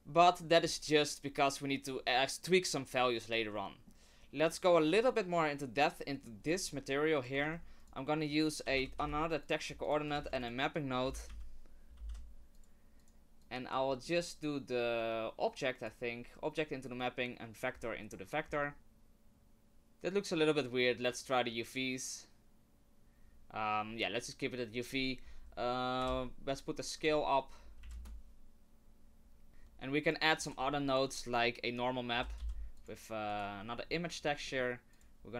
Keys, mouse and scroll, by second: 0.2 middle click, 0.6 scroll up 3, 3.5 middle click, 4.5 middle click, 6.1 middle click, 6.4-7.2 scroll up 6, 7.2 click, 7.4 shift+a, 10.1 shift+a, 12.1 p, 13.4 click, 13.9 middle click, 15.0 click, 20.6 click, 24.8 click, 27.0 click, 29.5 Delete, 30.0 click, 30.5 shift+a, 33.6 middle click, 33.9-34.5 scroll up 4, 34.5 middle click, 34.9 click.